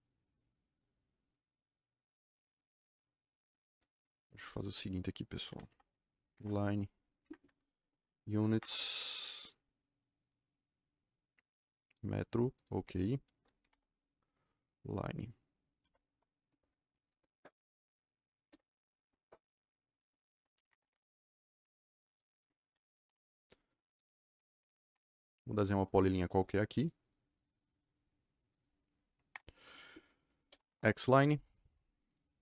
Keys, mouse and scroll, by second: 4.4 click, 4.8 click, 5.6 Delete, 6.2 l, 6.3 Return, 7.2 Escape, 7.3 Escape, 7.5-8.3 typing, 8.5 Return, 10.1 click, 11.8 click, 12.5 click, 13.5 l, 13.6 Return, 15.7 KP_0, 16.0 KP_0, 16.4 KP_Enter, 16.8 KP_1, 18.4 KP_Enter, 20.5 z, 20.6 Return, 20.8 Return, 22.0 click, 22.2 click, 23.0 Delete, 24.3-25.1 typing, 25.2 click, 25.5 click, 25.8 click, 26.1 click, 26.3 click, 26.9 click, 27.2 click, 27.4 click, 27.6 click, 28.4 click, 29.3 Return, 30.2-31.1 typing.